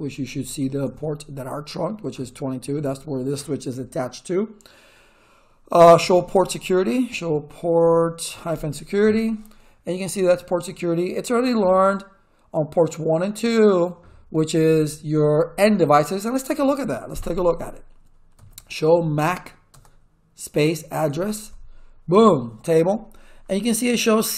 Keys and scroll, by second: 0.0-1.1 typing, 5.7-7.8 typing, 9.0 Return, 18.1-19.7 typing, 21.0 a, 21.4 Tab, 22.1 Return.